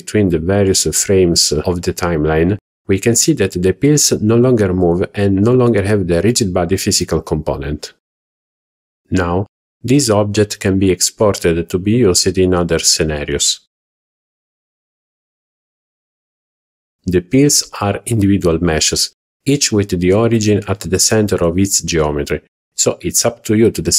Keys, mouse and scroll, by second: 4.7 click, 11.5 alt+h, 11.9 scroll down 2, 12.2 click, 12.6 z, 13.4 shift+middle click, 13.7-14.3 middle drag, 14.6 click, 15.4-15.7 middle drag, 15.9 scroll up 1, 16.2 shift+middle click, 16.9 click, 17.6 h, 17.9 click, 18.2 h, 19.7 click, 20.6 a.